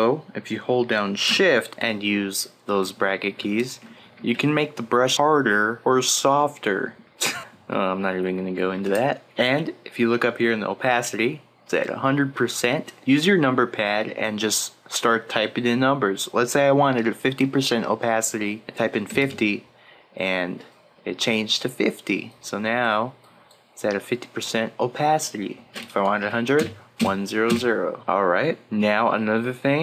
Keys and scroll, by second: 2.7 shift+], 4.1 shift+[, 5.5-8.1 typing, 18.5 5, 19.2 0, 26.1 1, 26.9 0.